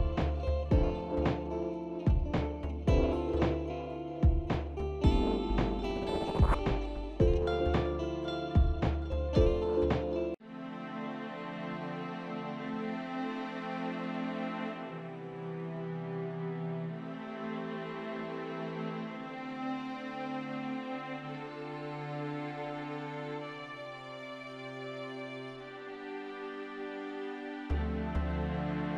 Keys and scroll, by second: 3.0-3.7 typing, 4.6 Return, 10.3 ctrl+0, 13.0-14.8 typing.